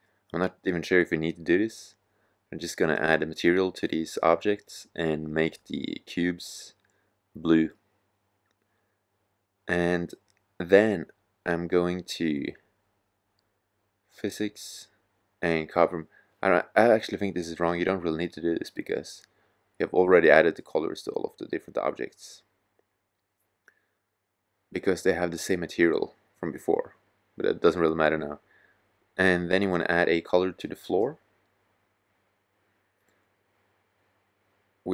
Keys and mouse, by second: 21.6-22.3 drag, 25.5-28.0 drag.